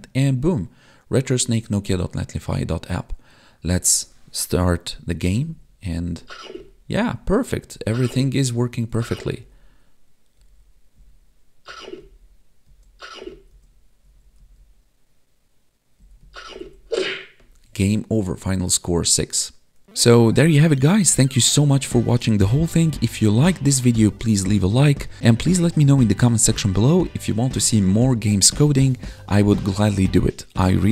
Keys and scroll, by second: 6.0 Left, 6.6 Down, 7.0 Right, 7.8 Up, 7.9 Left, 8.4 Up, 9.0 Right, 9.4 Up, 10.4 Left, 11.0 Up, 11.7 Right, 12.0 Down, 12.7 Left, 13.2 Up, 13.5 Left, 14.0 Up, 14.4 Left, 16.0 Down, 16.2 Right, 16.4 Up, 16.6 Left.